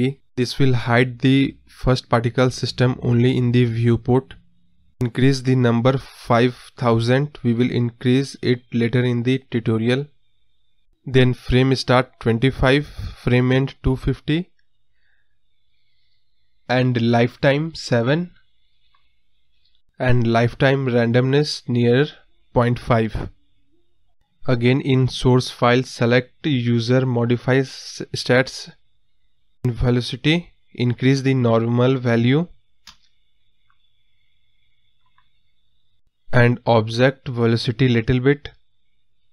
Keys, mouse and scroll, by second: 5.4 click, 6.0-6.3 scroll up 2, 6.3-6.8 scroll down 1, 9.4 KP_0, 12.7-15.4 drag, 16.9 click, 17.8 click, 18.9-22.0 drag, 26.3 click, 26.9 space, 27.1-27.7 scroll up 7, 27.7 space, 29.8 click, 31.1-35.5 drag, 35.5 space, 37.7-39.2 drag, 39.2-39.3 scroll down 5.